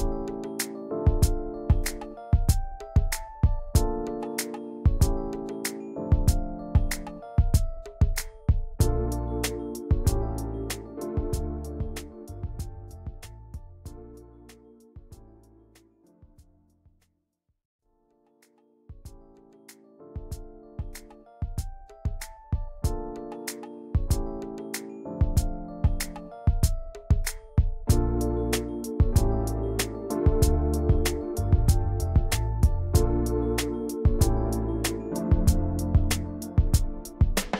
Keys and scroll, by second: 0.4 ctrl+], 8.3 ctrl+c, 8.5 ctrl+shift+v, 11.3 ctrl+shift+[, 11.4 ctrl+], 16.9 v, 28.7 ctrl+d, 34.3 ctrl+g.